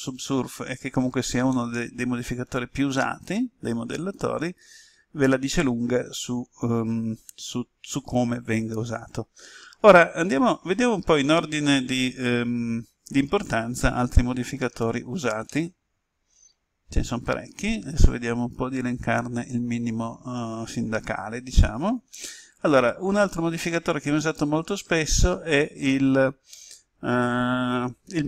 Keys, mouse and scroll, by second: 1.5-9.8 middle drag, 14.7-15.4 scroll down 1, 15.4-16.8 middle drag, 17.1-17.8 scroll up 1.